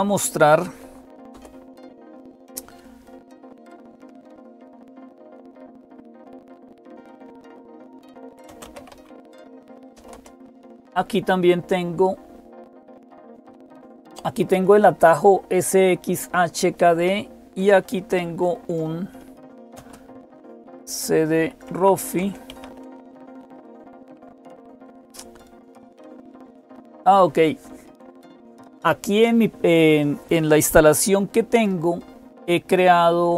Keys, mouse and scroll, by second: 0.0-33.3 typing, 1.1 super+Return, 5.5 ctrl++, 5.8 ctrl++, 6.5 ctrl++, 21.5 Tab, 22.0 Return.